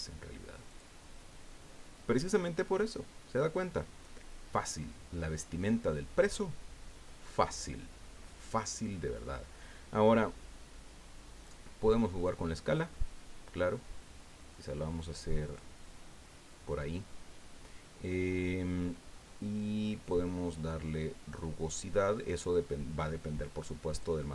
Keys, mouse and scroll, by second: 0.7 click, 11.4-15.7 drag, 20.1-24.2 drag.